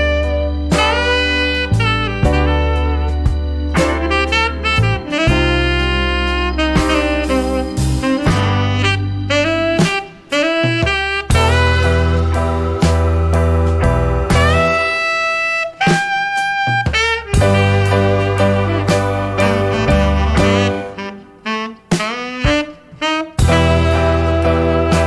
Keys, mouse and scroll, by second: 1.1 click, 2.1 click, 6.0 shift+9, 8.5-9.4 typing, 11.3 shift+=, 12.5-19.0 typing, 21.6 shift+8, 22.9 9, 23.3 0, 24.4 shift+0.